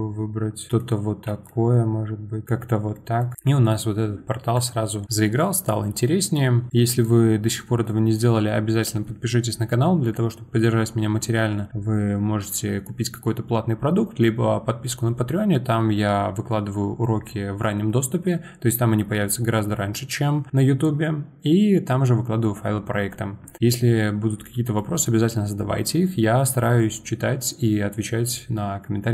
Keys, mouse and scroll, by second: 1.2 g, 2.7 scroll down 1, 2.9-4.5 middle drag, 4.5 click, 6.2 scroll down 1, 6.3-29.1 middle drag.